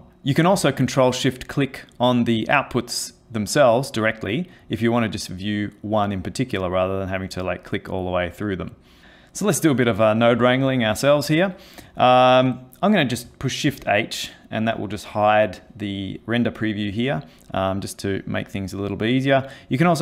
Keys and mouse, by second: 0.1 click, 1.2 ctrl+shift+click, 2.0 ctrl+shift+click, 2.5 ctrl+shift+click, 3.4 ctrl+shift+click, 4.2 ctrl+shift+click, 5.2 ctrl+shift+click, 6.9 ctrl+shift+click, 7.1 ctrl+shift+click, 7.2 ctrl+shift+click, 7.3 ctrl+shift+click, 9.0 shift+middle click, 11.4 click, 13.7 shift+h, 15.2 click.